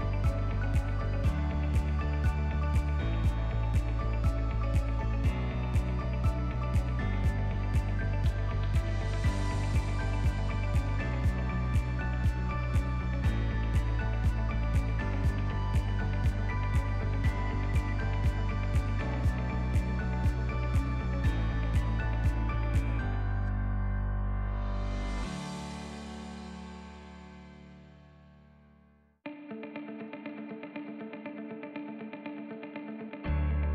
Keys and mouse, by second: 0.0 e, 3.8 e, 7.5 ctrl+middle click, 8.1 alt+z, 8.4 middle click, 9.1 shift+middle click, 9.6 e, 14.4 e, 20.0 click, 20.6 ctrl+r, 26.7 f, 27.4 3, 27.9 alt+click, 29.3 alt+shift+click, 30.4 e.